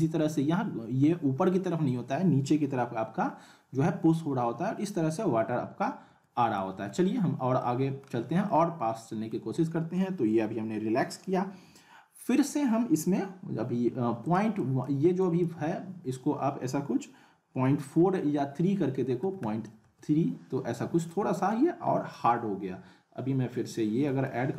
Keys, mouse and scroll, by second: 6.0-7.1 alt+middle drag, 7.1 scroll up 1, 7.6-8.2 alt+middle click, 8.2 scroll down 1, 8.5-9.4 alt+middle drag, 14.2 click, 21.2 click, 21.5-22.1 alt+middle drag, 23.5 F4, 24.3-24.5 scroll up 2.